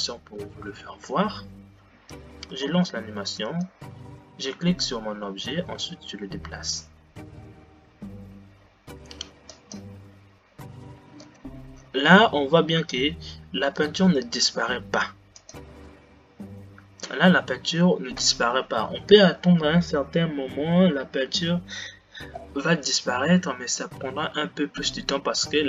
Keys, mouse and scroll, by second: 3.1 space, 4.6 click, 6.2 g, 11.8 g.